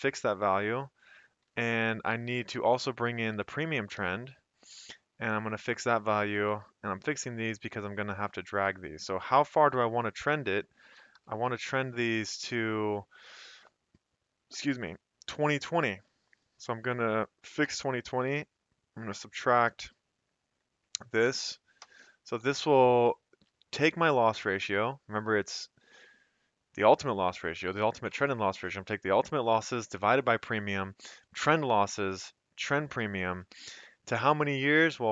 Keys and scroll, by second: 0.7-1.4 typing, 2.6-4.2 typing, 6.5 F4, 7.0-8.7 typing, 10.7-11.4 typing, 16.0 F4, 16.0 typing, 17.6 -, 20.9 ), 21.8 Return, 22.4 Up, 23.0 F2, 23.4 Escape, 24.8 F2, 25.7 Escape, 33.4 F2.